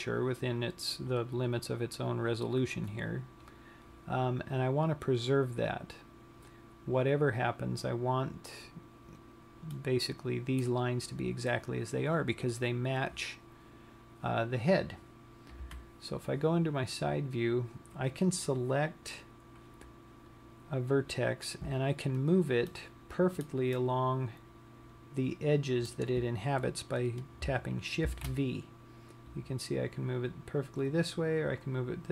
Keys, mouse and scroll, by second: 10.1 middle click, 15.9 KP_3, 17.8-19.3 scroll up 3, 19.4 click, 23.1 middle click, 24.2 scroll up 1, 24.3 middle click, 28.4 shift+v.